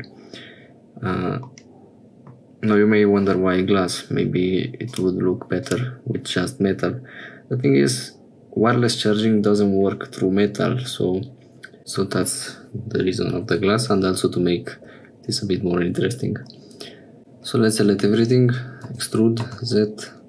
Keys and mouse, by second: 1.5 middle click, 4.9 click, 5.7 click, 19.1 e.